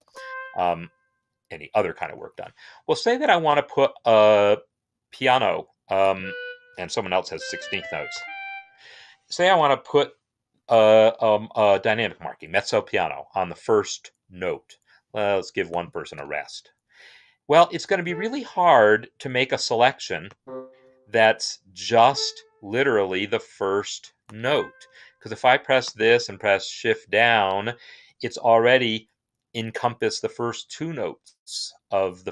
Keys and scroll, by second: 2.0 Escape, 6.3-8.4 typing, 8.5 Escape, 16.0 BackSpace, 26.6 shift+Down.